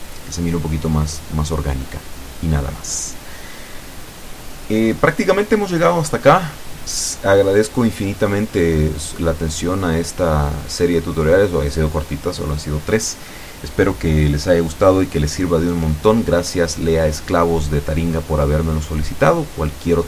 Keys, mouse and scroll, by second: 0.5 shift+middle click, 2.1-2.4 scroll up 1, 2.7 shift+middle click, 4.4 shift+click, 6.1-6.6 scroll down 1, 6.6-9.1 middle drag.